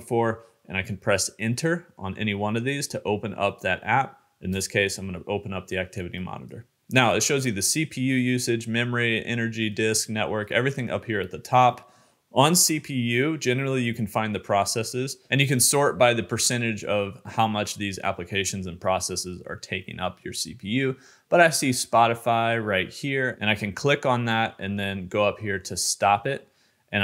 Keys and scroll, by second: 1.2 Return.